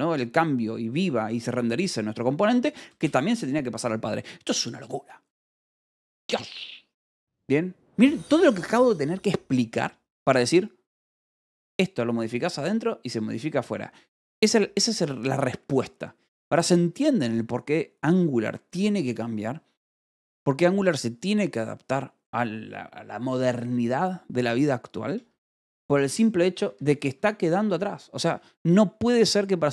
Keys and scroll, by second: 2.3 Escape, 2.6 j, 3.5 shift+v, 6.0 Escape, 26.0 k, 26.8 o, 27.1 Escape, 28.1 k, 29.0 shift+v, 29.1 Escape.